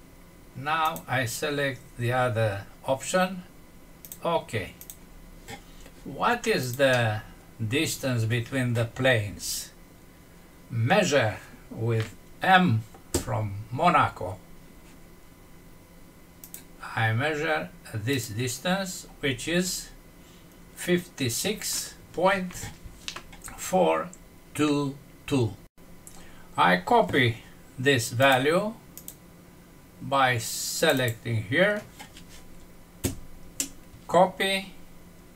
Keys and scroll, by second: 6.8 F6, 32.9 ctrl+c.